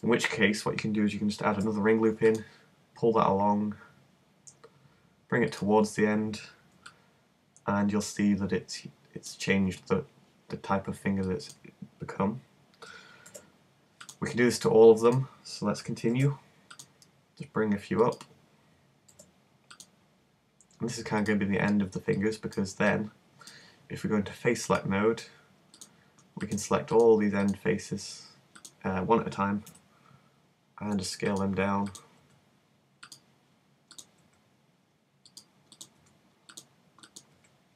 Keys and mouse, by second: 1.6 ctrl+r, 5.6-8.9 drag, 13.3 ctrl+r, 16.1 ctrl+r, 19.1 ctrl+r, 29.7 s, 32.2 s, 34.2 s, 36.0 s, 37.4 s.